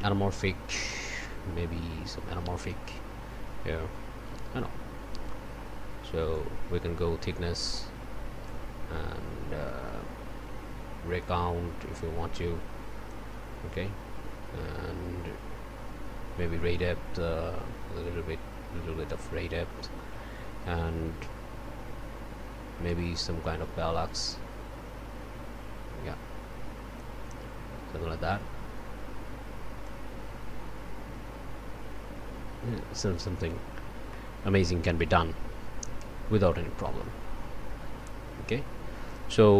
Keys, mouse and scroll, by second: 2.5 click, 6.3-8.7 drag, 11.2-13.3 drag, 16.7-19.3 drag, 25.4-27.2 drag, 29.8-33.4 drag, 33.9 scroll down 1, 39.1 click.